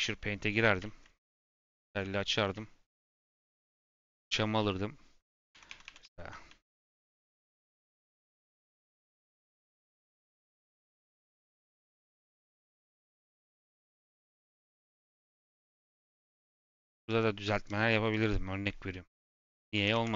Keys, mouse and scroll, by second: 0.0-0.3 scroll down 3, 0.4 middle click, 1.0-1.4 scroll up 3, 1.4 z, 1.7 middle click, 1.9 scroll up 3, 2.1-5.3 middle drag, 5.3-6.4 s, 6.6 s, 6.8 s, 7.1 f, 8.5-10.0 drag, 10.0 ctrl+z, 10.9-13.2 typing, 14.6-16.1 drag, 16.1 ctrl+z, 16.4-20.0 drag, 20.0 ctrl+z.